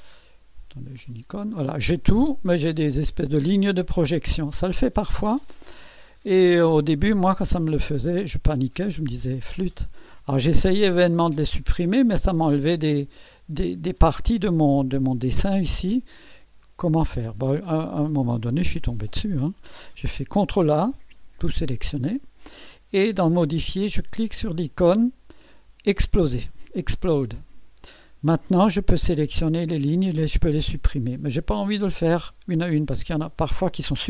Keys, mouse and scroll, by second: 1.9 scroll down 2, 2.4 scroll up 2, 5.8 scroll down 2, 6.4 scroll up 2, 7.2 scroll down 2, 8.3 scroll up 2, 11.5 click, 12.7 click, 17.1 scroll down 2, 20.6 ctrl+a, 25.9 click, 31.1 click.